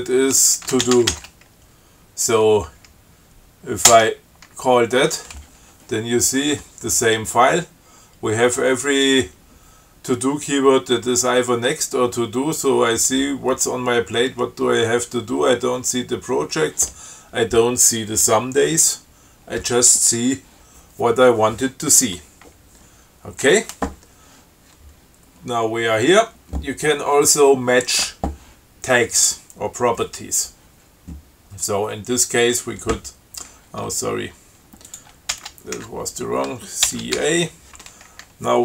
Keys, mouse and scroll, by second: 0.8-1.9 typing, 4.2 Return, 23.7 q, 32.7 click, 35.2 ctrl+click, 35.6 ctrl+x, 36.1 ctrl+1, 37.2 ctrl+c, 37.4 ctrl+a.